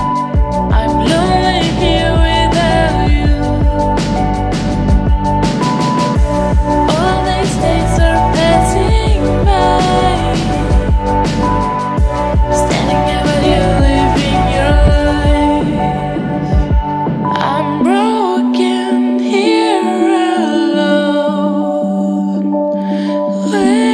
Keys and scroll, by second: 0.5 ctrl+j, 19.5 ctrl+z.